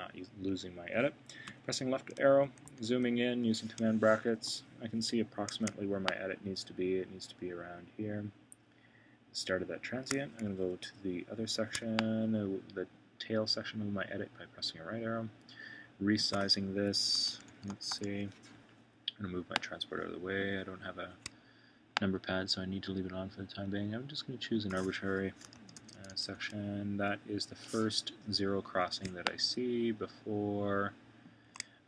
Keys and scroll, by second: 1.4 Left, 2.4 super+], 10.4 Right, 16.7 Right, 17.2 super+], 25.0 Right, 25.5 super+].